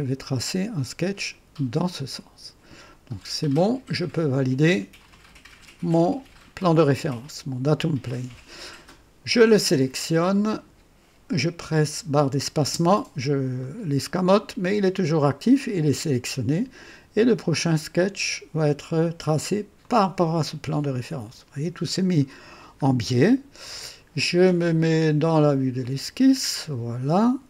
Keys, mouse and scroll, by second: 3.7-4.4 drag, 5.1 click, 6.0-7.3 drag, 8.1-8.7 drag, 10.3 click, 12.6 space, 13.6-14.4 right drag, 19.8 click, 21.1 scroll up 1, 21.9 right click, 22.8 scroll up 2, 23.3-23.9 right drag, 23.5 click, 25.8 click, 26.6-26.9 scroll up 2, 27.2-27.4 right drag.